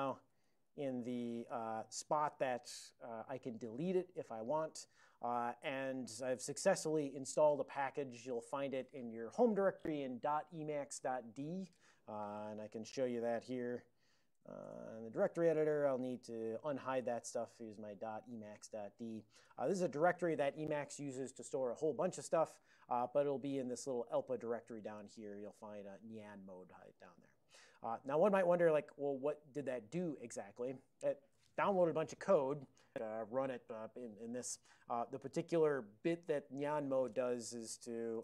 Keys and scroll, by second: 0.1-1.2 typing, 1.7 ctrl+a, 12.2 ctrl+x, 13.4 ., 14.7 Return, 17.1-18.4 typing, 18.6 Return, 19.4 Return, 23.3-25.5 typing, 24.2 Return, 26.0 Return, 37.6 alt+x, 38.0-38.2 typing.